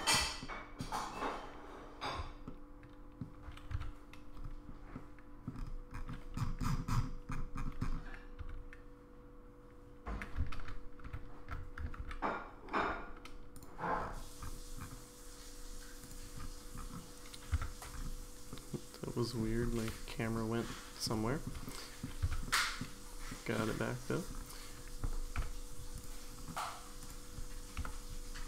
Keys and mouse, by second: 0.4 middle click, 2.5-3.2 shift+middle drag, 3.7 1, 4.9-5.5 middle drag, 8.4 2, 10.6 ctrl+z, 11.1 ctrl+z, 12.8 ctrl+z, 13.6 click, 16.0 click, 17.5 Tab, 18.5 middle click, 20.8 middle click, 21.3 shift+middle click, 21.6 middle click, 22.2 1, 22.4 middle click, 23.3 middle click, 25.3 KP_Decimal, 26.0 click, 27.8 KP_Decimal.